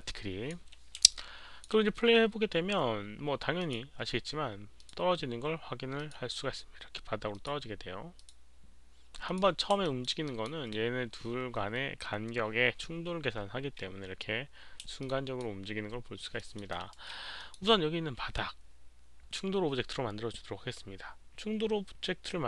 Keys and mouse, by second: 1.1 alt+click, 3.5 alt+click, 3.5 h, 4.8 alt+click, 5.9 click, 7.3 click, 8.1 click, 9.2 click, 9.8 alt+middle click, 10.2 alt+click, 14.8 alt+middle click, 15.0-15.4 alt+drag, 16.3 alt+middle click, 16.7 alt+right click, 16.7 alt+click, 17.3 click.